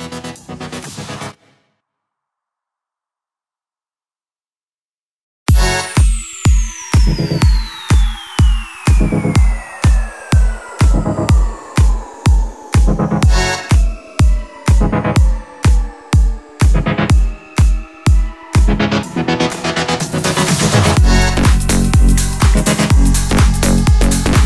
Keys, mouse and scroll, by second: 0.2-1.0 alt+scroll down 2, 1.0-1.4 alt+scroll up 2, 1.4 alt+scroll down 2, 2.0-5.3 drag, 3.9-5.3 drag, 5.3 right click, 7.4 click, 8.7-9.3 alt+scroll up 2, 10.0-11.3 alt+shift+drag, 14.3 alt+scroll down 1, 15.0-16.1 drag, 19.6 click, 21.3 alt+scroll up 1, 21.8-22.9 drag, 23.3 alt+scroll down 1, 24.0 click.